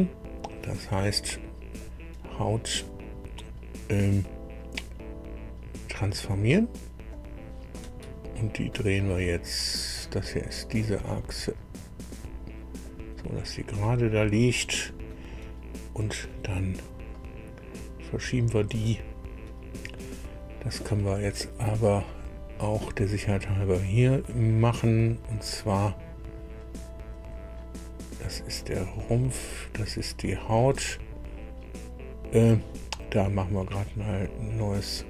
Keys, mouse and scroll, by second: 1.8 right click, 7.1 right click, 7.7 middle click, 7.8-8.2 scroll down 1, 9.5 middle click, 10.7-13.0 right drag, 13.1-15.2 middle drag, 17.1 middle click, 18.5 scroll up 1, 22.0 click, 27.1 click, 29.3 click, 33.8 click.